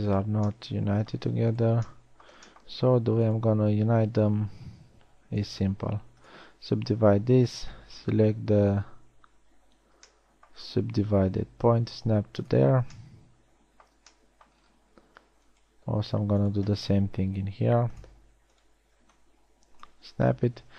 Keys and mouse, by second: 0.3 g, 5.7 g, 6.3 w, 13.7 middle click, 17.6 w.